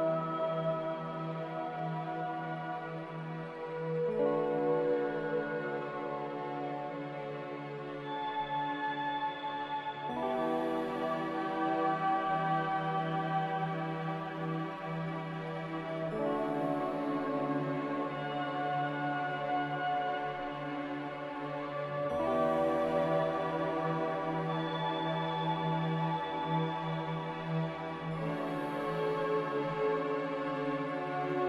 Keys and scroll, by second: 3.4 ctrl+z, 8.5-9.2 typing, 11.8 ctrl+z, 15.2 z, 16.4 ctrl+z, 17.3 Escape, 21.1-21.8 typing, 25.8 b, 30.1 n.